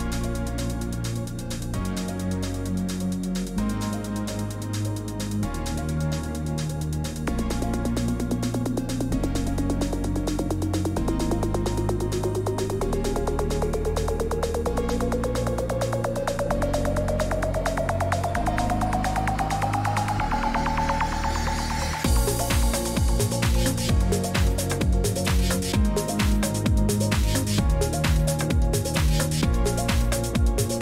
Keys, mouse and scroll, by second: 0.5 click, 1.1 click, 1.3 click, 2.0 click, 2.3 click, 2.5 click, 3.0 middle click, 3.0 scroll down 3, 3.6-3.9 scroll, 4.3 scroll up 4, 8.4 scroll up 1, 8.5 click, 8.8 click, 9.4 click, 9.6 scroll, 9.8 middle click, 9.8 click, 10.4 middle click, 10.8 click, 11.7 middle click, 11.8-12.1 scroll, 16.4 click, 29.0-30.8 drag.